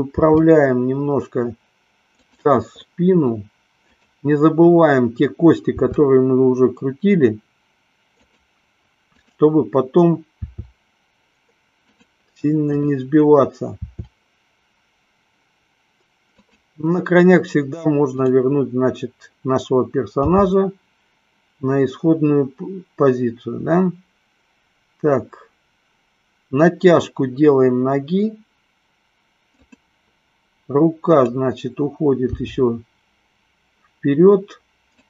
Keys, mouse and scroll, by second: 0.2 r, 5.9 r, 9.3 click, 10.7 r, 12.9 click, 14.1 r, 18.2 click, 20.4 g, 30.1 click, 31.2 click, 32.7 g.